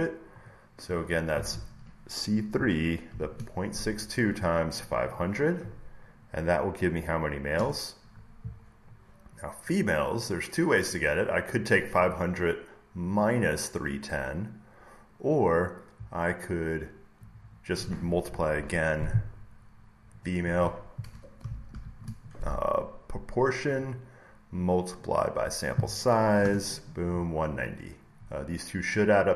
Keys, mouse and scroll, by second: 0.4 click, 2.4-6.7 drag, 3.0 *, 7.5 Return, 10.1 click, 12.0 click, 13.1 click, 14.4 click, 17.4-19.4 drag, 18.4 =, 20.1-23.4 drag, 21.6 *, 25.0 click, 26.3 Return, 28.8 click.